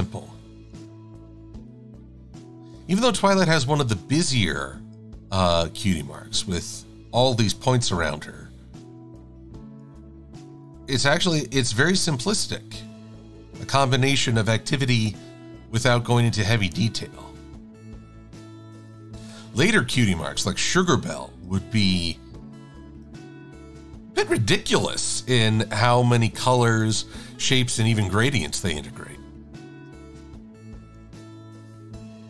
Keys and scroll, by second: 23.1 shift+x, 24.9 v, 26.3 shift+super+a, 28.6 v, 31.2 d.